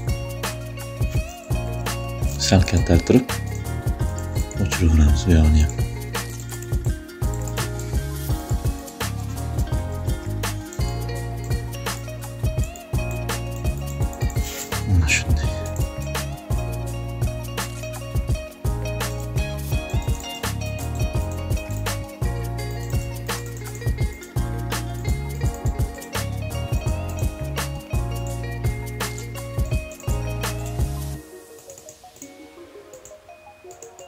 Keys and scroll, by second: 1.2 ], 4.1 shift+space, 6.3 space, 7.1 shift+space, 9.4 ], 15.4 space.